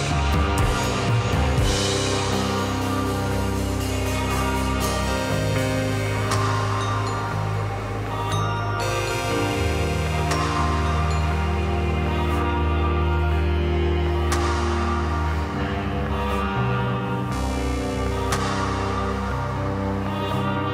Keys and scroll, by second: 0.9 Page_Down, 6.3 Page_Down.